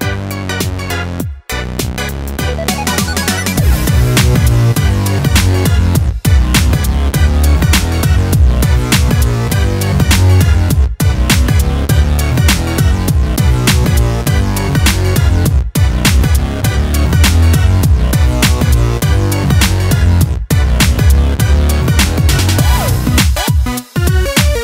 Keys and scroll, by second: 5.2 ctrl+space, 14.3 ctrl+alt+z, 17.9 ctrl+j.